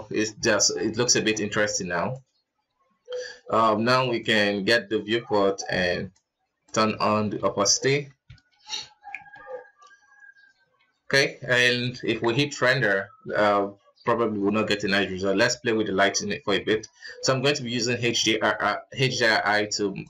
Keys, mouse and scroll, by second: 0.0 scroll down 5, 0.5 scroll up 6, 2.0 right click, 3.6 scroll down 3, 4.2-4.7 drag, 4.7-5.3 scroll down 3, 5.5-7.0 drag, 7.0 scroll up 2, 7.4 ctrl+s, 7.8-8.3 scroll down 2, 8.3 alt+a, 8.7-9.1 scroll up 2, 9.3 ctrl+s, 10.9-11.7 scroll down 1, 14.3 z, 14.7 click, 15.5-16.4 drag, 16.4-16.9 scroll down 10, 16.9 KP_0, 17.5-18.4 scroll up 4.